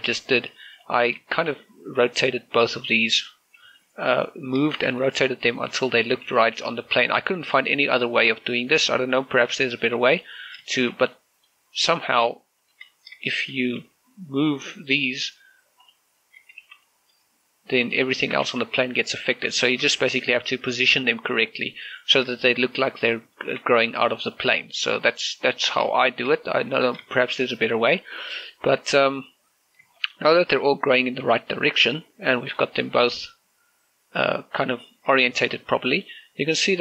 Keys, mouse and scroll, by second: 1.6 click, 1.9 scroll down 1, 2.1 shift+middle click, 2.4 scroll up 1, 3.2 scroll down 1, 3.6 r, 4.0 click, 5.8 r, 6.2 click, 6.4 shift+middle click, 6.8 a, 7.0 b, 7.2 click, 7.6 r, 9.0 ctrl+click, 10.1 click, 10.4 shift+middle click, 11.0 scroll up 1, 11.5 shift+middle click, 11.8-13.4 middle drag, 13.4 shift+click, 13.7 scroll down 1, 14.0 shift+middle click, 14.6 g, 15.2 right click, 16.6 click, 17.2 a, 17.4 click, 18.6 shift+click, 19.0 shift+middle click, 19.2 g, 20.0 right click, 20.4 shift+middle click, 20.8 g, 21.2 right click, 22.1 middle click, 22.4 middle click, 22.4 scroll up 1, 23.2 shift+middle click, 23.4 scroll up 1, 24.2 shift+middle click, 25.1 g, 25.6 right click, 26.4 scroll down 1, 26.8 shift+middle click, 27.7 scroll down 1, 27.9 shift+middle click, 30.4 scroll up 1, 30.8 middle click, 32.8 scroll down 1, 33.1 shift+middle click, 33.6 scroll down 1, 33.8 middle click, 35.7 scroll up 1, 36.0 shift+middle click, 36.2-36.8 shift+scroll up 2.